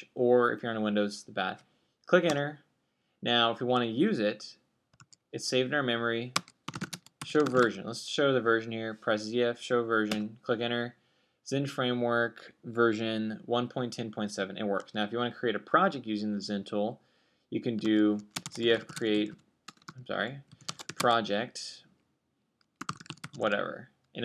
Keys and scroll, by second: 5.7-9.2 typing, 18.6-22.5 typing, 23.6-24.2 typing.